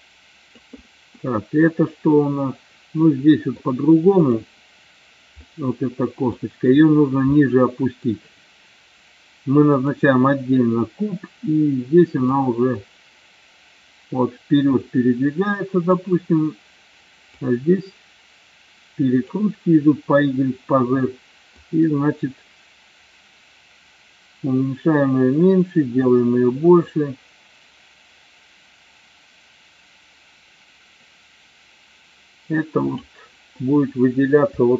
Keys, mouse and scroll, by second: 1.2-3.6 middle drag, 4.2 click, 5.5-6.5 middle drag, 7.5 middle click, 12.3-16.0 drag, 17.3-19.5 drag, 21.6-33.1 drag, 33.7-34.7 middle drag.